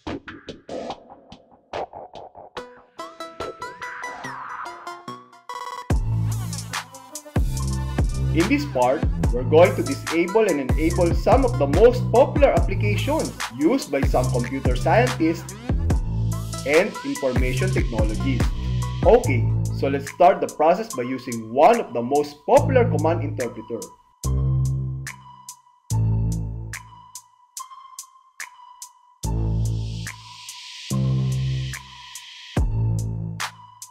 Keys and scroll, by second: 4.5 super+r, 7.3 Return, 15.6 Return, 20.1 End, 22.1 Right, 24.1 s, 25.5 s, 27.1 s, 29.1 Tab, 31.1 p, 32.3 p.